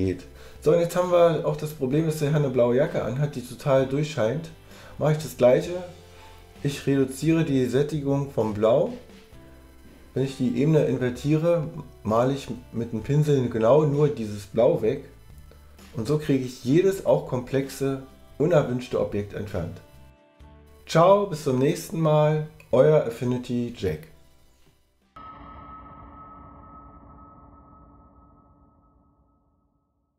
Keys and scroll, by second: 11.5 super+i, 14.2 b.